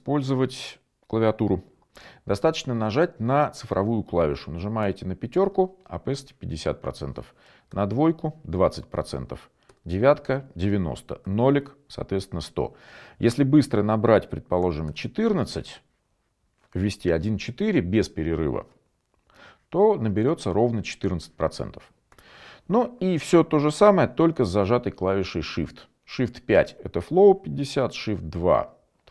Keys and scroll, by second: 5.2 5, 10.0 9, 11.5 0, 14.9-15.6 typing, 25.3 shift+5.